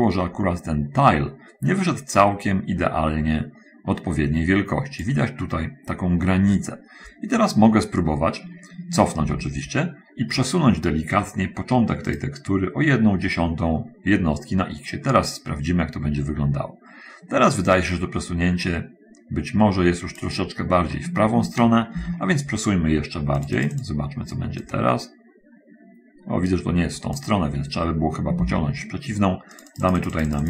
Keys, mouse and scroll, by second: 9.6 ctrl+z, 12.4 click, 14.8-20.7 drag, 22.3 ctrl+z, 23.8 click, 25.0-27.6 drag, 28.6 ctrl+z, 29.9-30.4 drag.